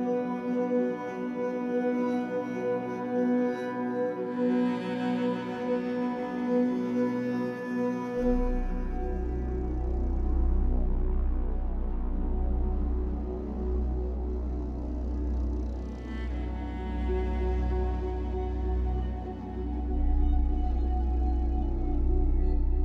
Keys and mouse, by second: 0.0 click, 3.1-5.6 drag, 7.7 click, 9.4-13.0 drag, 16.8-17.8 drag, 18.2 click, 18.8 click, 20.6 click, 22.7 click.